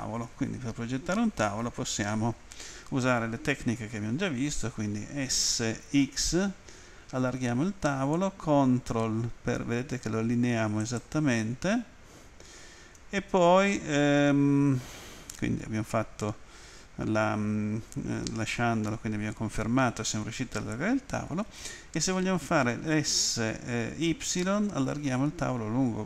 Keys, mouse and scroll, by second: 5.6-6.3 typing, 10.8 ctrl+click, 24.2 y.